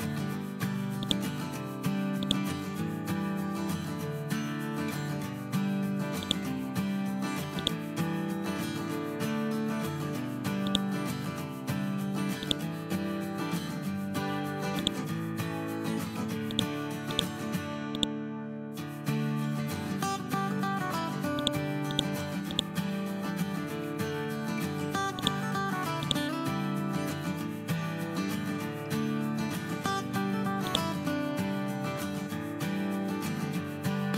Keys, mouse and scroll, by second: 0.9 click, 6.1 click, 10.6 click, 14.7-20.1 drag, 21.3 right click, 21.8 click, 25.1-28.1 drag, 30.6 click.